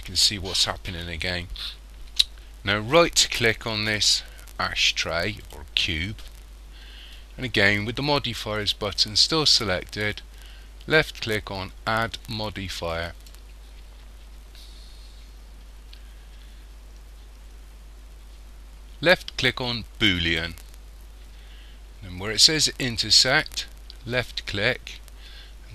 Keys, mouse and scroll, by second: 5.5 right click, 12.9 click, 24.2 click.